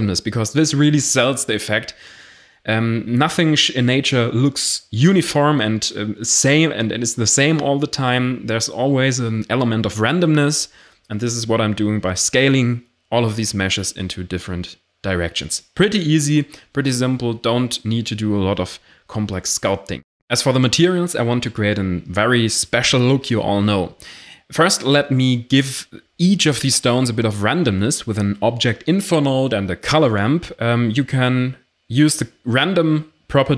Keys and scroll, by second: 0.0-9.0 typing, 10.1-12.9 typing, 16.1 g, 16.4 r, 18.7 ctrl+s, 20.0 x, 22.0-22.6 typing, 23.1 Return, 23.4 Caps_Lock, 24.0-24.7 typing, 25.0 Return, 27.4 shift+a, 27.7 r, 27.9 m, 27.9 p, 28.1 Return.